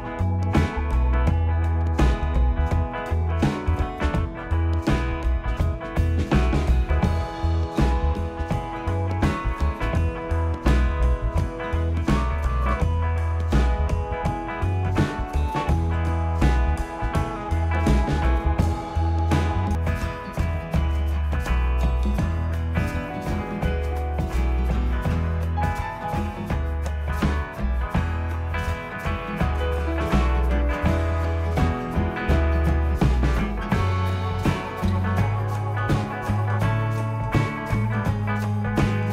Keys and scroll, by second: 0.8 Delete, 3.7 Delete, 4.7 Delete, 5.3 Delete, 6.5 Delete, 7.0 Delete, 7.6 Delete, 12.9 Delete, 15.0 Delete, 15.7 Delete, 33.4 ctrl+c, 33.6 ctrl+shift+v.